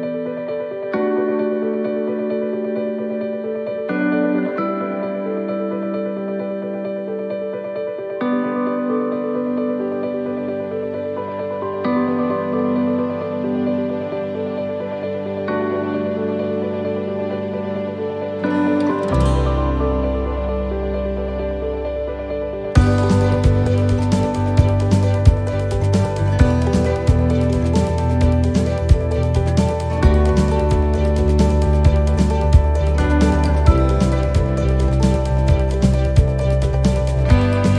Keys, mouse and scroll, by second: 5.5 right click, 5.9 l, 7.1 click, 8.6 click, 10.7 click, 15.8 middle click, 17.3 shift+middle click, 17.8 middle click, 18.2-19.3 scroll up 4, 18.6 shift+middle click, 19.7 click, 21.3 click, 22.2 middle click, 27.2 middle click, 28.5 shift+d, 29.7 click, 34.3 click, 34.3 shift+d, 35.1 click, 37.3-37.7 scroll up 1.